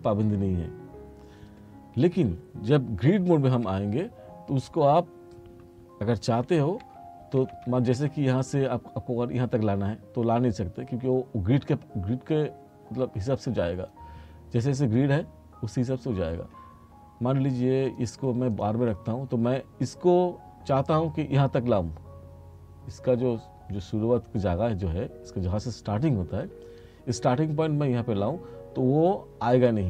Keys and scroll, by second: 3.5 F4, 6.5 t.